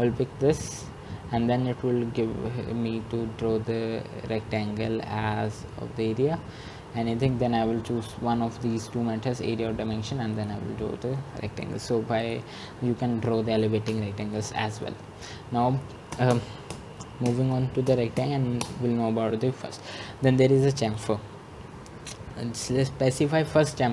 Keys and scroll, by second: 16.4 Escape, 18.9 typing.